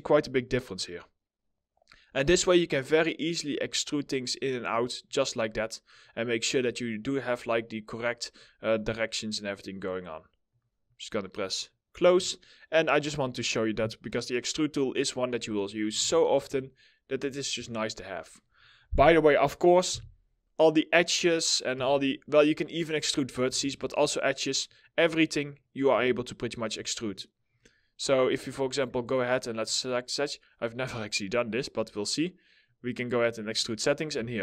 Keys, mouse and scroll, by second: 12.0 alt+middle click, 12.6 scroll down 1, 13.0 middle click, 14.6-15.3 scroll up 1, 15.4 4, 16.3 alt+middle click, 19.4 2, 21.2 1, 22.9 2, 24.3 middle click, 26.0 shift+click, 27.2-27.6 scroll up 1, 27.7 alt+middle click, 29.6 ctrl+click, 33.8 alt+middle click.